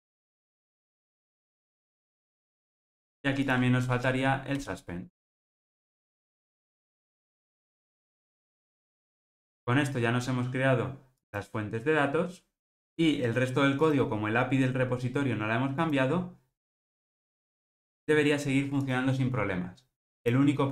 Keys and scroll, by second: 1.6 alt+super+l, 1.9 ctrl+alt+o, 3.8 alt+Return.